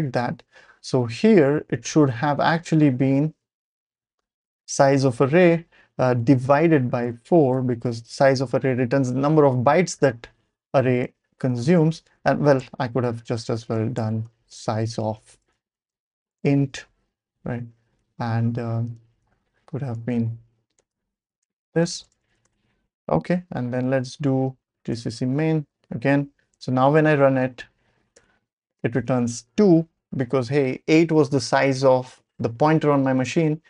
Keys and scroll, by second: 0.3 Up, 0.6 Page_Up, 1.2 Page_Up, 1.3 Page_Up, 1.6-4.2 typing, 3.4 Right, 3.9 Right, 4.4 Right, 4.5 Right, 4.7 Right, 7.0 i, 7.5 /, 10.5 4, 11.6-16.9 typing, 12.0 Left, 17.3-17.7 Left, 17.8 Left, 17.9 Left, 18.0-19.6 typing, 18.4 Left, 20.8-24.4 typing, 21.3 Escape, 24.9 Return, 26.5 ctrl+l, 27.0 Up, 27.2 Up, 27.6 Up, 28.2 Return.